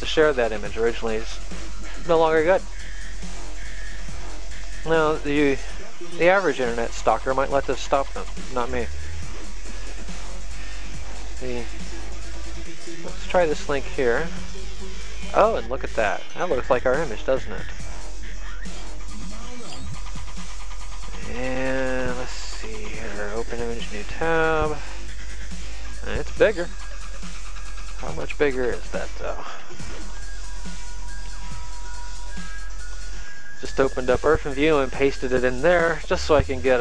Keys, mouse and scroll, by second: 14.2 click, 18.1 click, 21.5 right click, 24.2 click, 25.7 click, 28.3 right click, 29.7 click, 32.0 click, 33.8 ctrl+v, 35.1 click.